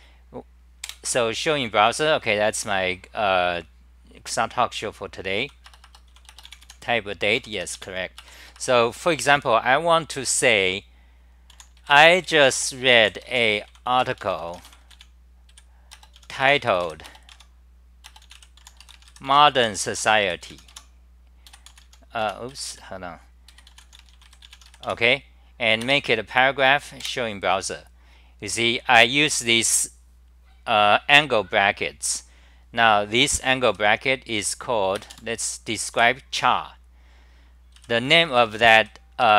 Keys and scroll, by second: 0.9 super+r, 5.4 c, 5.7 Return, 5.8 Return, 7.3-9.5 typing, 11.5 u, 14.0 BackSpace, 17.3 Home, 18.6 u, 20.7 Home, 21.3-24.2 typing, 22.2 Home, 24.9 Home, 27.1 super+r, 33.7 m, 34.4 m, 37.8-39.0 typing, 39.2 Right.